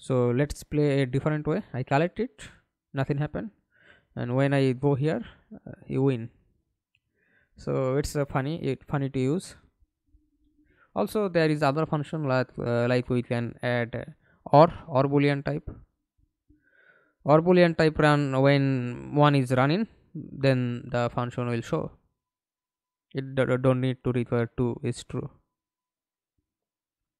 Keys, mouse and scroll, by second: 0.5-5.3 typing, 6.5 s, 7.5 d, 7.8 Escape, 8.1 middle click, 8.9 F11, 13.9 Delete, 16.3 typing, 17.3 Return, 23.8 double click, 26.0 middle click, 26.8 F11.